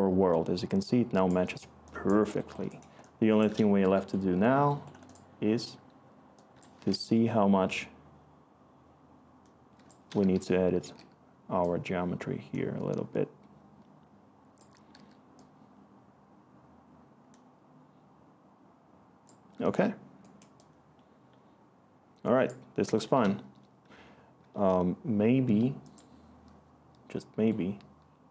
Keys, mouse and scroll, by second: 1.5-3.1 Return, 10.3-10.8 typing, 14.7-15.4 typing.